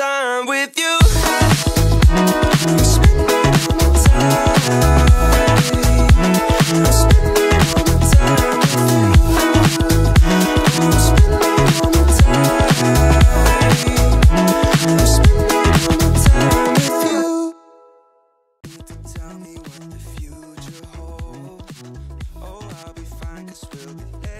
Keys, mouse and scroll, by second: 0.2 click, 1.1-3.0 drag, 4.0-4.8 drag, 6.1 right click, 7.3 click, 8.0 click, 8.9-9.5 drag, 10.2 click, 10.9-11.3 middle drag, 11.5-12.1 scroll up 3, 12.1-12.4 shift+middle drag, 12.8-13.2 middle drag, 13.4 Tab, 13.8-14.3 scroll up 1, 15.2 middle click, 16.7 alt+click, 17.8 alt+shift+click, 18.5-20.6 middle drag, 20.9 s, 23.5 KP_1, 23.9 KP_Decimal.